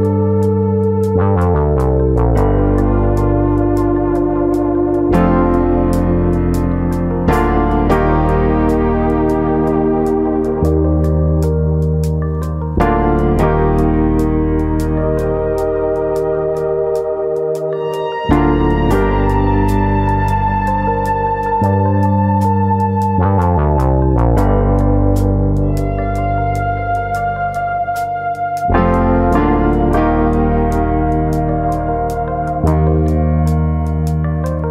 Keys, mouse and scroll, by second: 1.8 right click, 2.9 click, 4.4 click, 5.3 click, 7.1 click, 8.5 middle click, 9.7 middle click, 9.9 e, 13.3 click, 13.8 e, 16.2 click, 18.3 middle click, 18.8 shift+middle click, 20.1 click, 20.7 middle click, 21.3 shift+middle click, 22.7 alt+click, 22.9 middle click, 23.9 click, 24.7 middle click, 25.1 shift+middle click, 25.6 middle click, 26.2 click, 26.4 middle click, 27.2 click, 28.4 click, 28.6 middle click, 29.0 shift+middle click, 29.4 shift+click, 29.6 shift+click, 29.6 middle click, 30.6 click, 31.7 click, 31.9 shift+click, 31.9 middle click, 32.5 click, 33.5 middle click, 34.0 shift+middle click, 34.3 middle click.